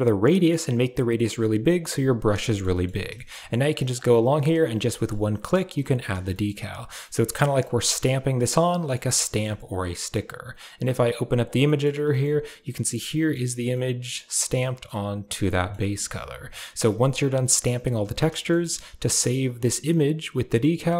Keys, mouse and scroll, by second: 0.2 click, 3.0 shift+middle click, 4.3 middle click, 4.9 shift+middle click, 5.4 click, 6.2 shift+middle click, 6.8 middle click, 7.2 middle click, 7.6 middle click, 8.3 middle click, 9.1-11.0 shift+middle drag, 11.0 click, 11.6 shift+middle click, 12.0 middle click, 13.0 middle click, 13.7 middle click, 14.4 middle click, 15.5 middle click, 16.7 middle click, 18.3 shift+middle click.